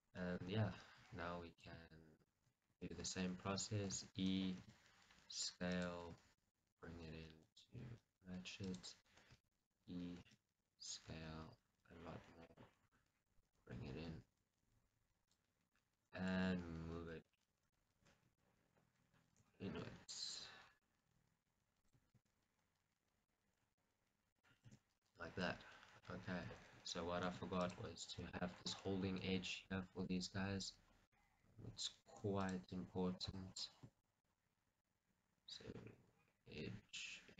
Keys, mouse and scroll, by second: 0.0 scroll down 1, 0.2 middle click, 0.5 Tab, 0.8-1.7 scroll up 1, 1.7 click, 2.2-6.7 middle drag, 2.9 alt+click, 3.4-4.0 scroll up 2, 4.0 e, 4.3 right click, 4.6 s, 5.9 click, 6.2 g, 8.9 click, 9.4 e, 9.6 right click, 10.3 s, 12.7 click, 12.9 g, 15.4 click, 15.8-18.4 middle drag, 25.6 middle click, 26.2 scroll, 28.5 click, 28.8 scroll, 29.0-30.5 middle drag, 30.5-30.9 scroll, 33.4 click, 33.7 scroll, 34.1-37.3 shift+middle drag.